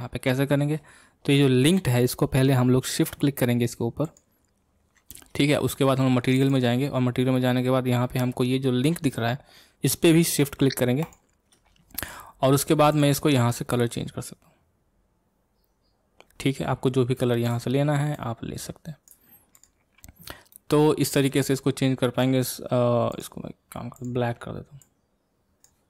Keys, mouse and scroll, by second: 4.2-13.7 shift+drag, 19.6 click, 20.5-23.2 middle drag, 23.2 click, 24.8 click.